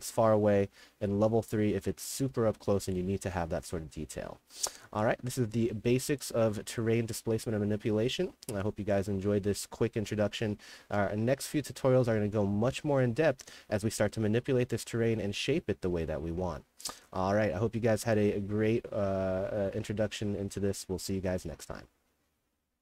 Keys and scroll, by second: 0.0-3.8 typing, 5.1 a, 7.3 a, 7.9 s, 9.9-10.7 typing, 13.0 a, 16.7-21.7 typing.